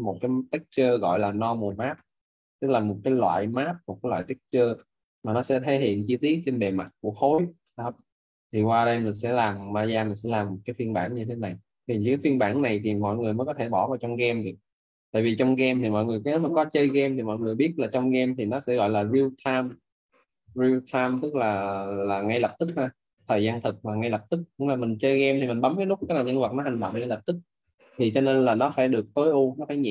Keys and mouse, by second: 0.2 alt+right click, 8.8 alt+middle click, 12.8 alt+click, 14.0 alt+middle click, 18.5 shift+click, 23.8 alt+`.